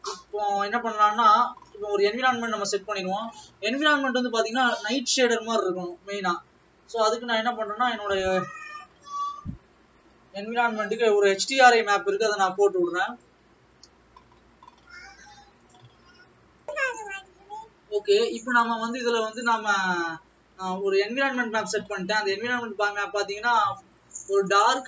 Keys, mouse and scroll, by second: 4.8 click.